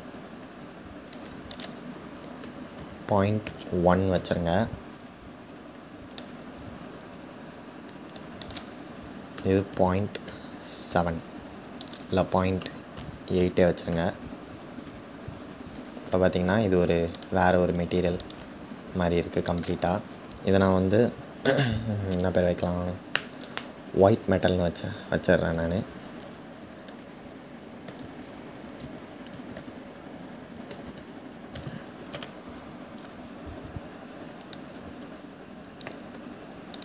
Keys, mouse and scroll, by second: 14.9-15.5 scroll down 2, 31.1 click, 34.6-36.4 drag.